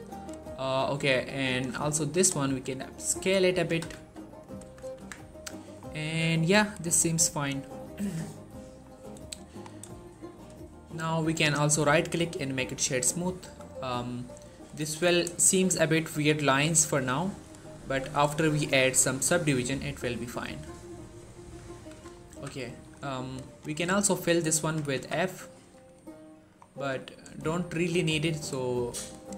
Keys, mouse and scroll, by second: 2.3 s, 3.4 click, 3.5 g, 3.8 x, 4.3 click, 4.5 z, 4.8 Tab, 5.0 scroll down 1, 5.4 shift+middle click, 7.2-7.7 scroll down 1, 8.6-9.0 scroll up 1, 9.2 shift+middle click, 9.9 shift+middle click, 11.0 right click, 11.9 click, 13.5-13.9 scroll down 1, 14.7 shift+middle click, 15.4 shift+middle click, 15.5-16.3 scroll up 2, 16.3-17.3 middle drag, 17.6 1, 18.2 shift+middle click, 19.0 shift+middle click, 19.4 scroll up 1, 21.3 1, 21.8 Tab, 22.0 scroll up 1, 22.1 z, 22.5 shift+middle click, 22.8-23.3 scroll up 1, 23.3 click, 23.6 middle click, 24.5-24.8 typing, 25.0 scroll down 2, 25.1 middle click, 25.5 Tab, 25.7 scroll down 2, 26.2 middle click, 26.4 scroll up 2, 26.6 Tab, 27.2-28.1 shift+middle click, 28.0-29.0 scroll up 1, 29.0 click.